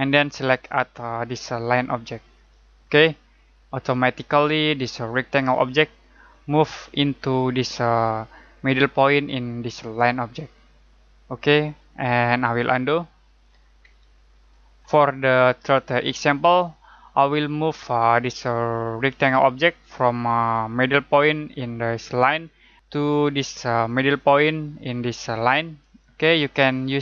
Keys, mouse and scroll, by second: 2.3 click, 13.2 ctrl+z, 14.0 z.